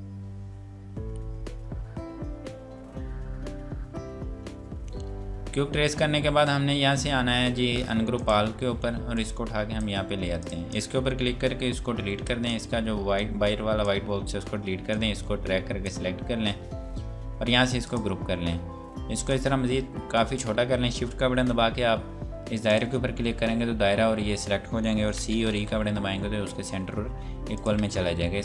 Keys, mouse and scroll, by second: 8.2 click, 12.2 Delete, 12.5 click, 14.4 Delete, 14.9 click, 22.7 click, 25.2-25.6 typing, 26.4 scroll up 1, 27.5 click.